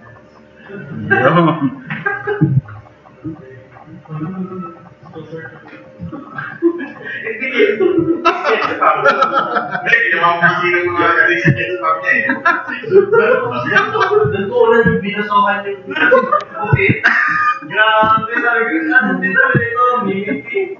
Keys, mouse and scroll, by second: 11.5-12.3 drag, 12.7 click, 12.9-13.3 drag, 13.6 click, 18.1 2, 19.0 click, 19.9-20.3 drag, 20.3 click, 20.6 click.